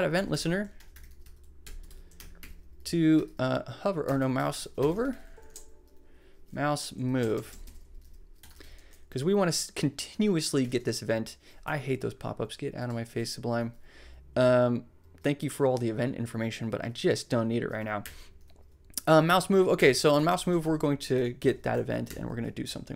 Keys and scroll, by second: 0.0-5.1 typing, 5.4 Right, 6.6 Left, 7.3 alt+shift+Left, 8.2-9.0 typing, 10.1 Right, 11.6 Escape, 17.5 s, 18.0 BackSpace, 19.2-21.4 typing, 22.0 shift+Left.